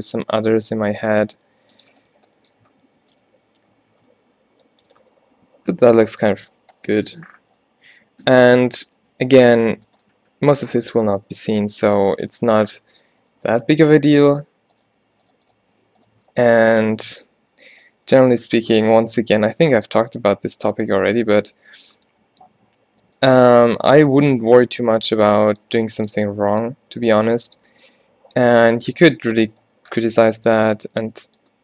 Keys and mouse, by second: 2.1-3.7 drag, 2.3 f, 2.7 Tab, 3.3 a, 3.6 Tab, 3.8 a, 4.0 a, 13.3 middle click, 16.5-18.0 middle drag, 18.9 shift+Tab, 19.5-22.3 typing, 23.6 ctrl+z, 24.4-26.7 typing, 27.8 g.